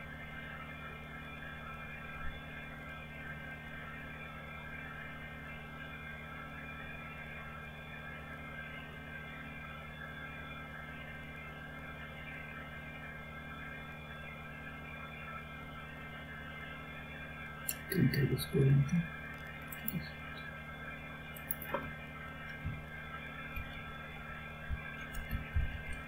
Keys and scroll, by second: 22.5 typing, 24.9-25.5 typing.